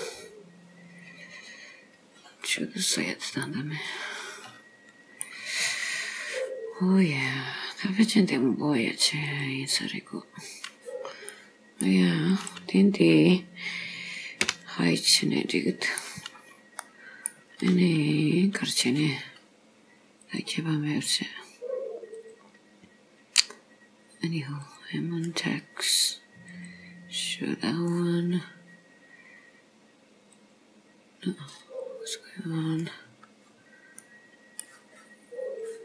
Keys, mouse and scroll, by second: 3.5 middle click, 5.7-6.1 scroll down 3, 7.5-9.3 scroll down 4, 9.3 click, 9.3-10.5 scroll down 1, 11.4 middle click, 12.4 click, 14.5 h, 15.1 middle click, 16.3-16.7 scroll up 4, 16.8 middle click, 17.7-18.2 scroll down 3, 18.2 scroll up 2, 20.3 click, 22.2 click, 26.5 click, 30.4 click, 31.7 click, 33.3-34.1 scroll down 3, 34.1 middle click.